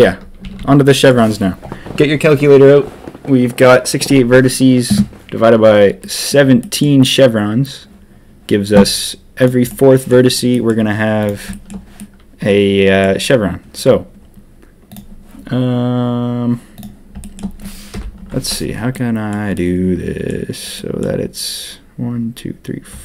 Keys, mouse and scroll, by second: 0.4 a, 0.5 a, 0.8 middle click, 6.0 middle click, 6.6 middle click, 9.3 click, 9.6 middle click, 10.5 middle click, 11.2 click, 11.5 shift+middle click, 11.9-13.0 middle drag, 14.8 click, 17.2 shift+click, 17.9 KP_1, 18.9 middle click, 19.5 middle click, 20.7 middle click.